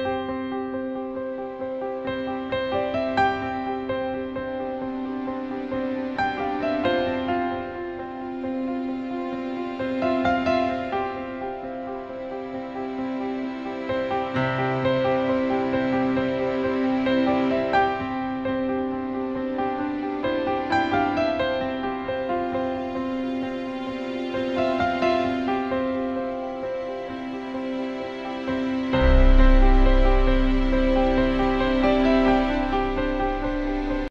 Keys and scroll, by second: 2.4 BackSpace, 23.0 BackSpace, 23.3 BackSpace.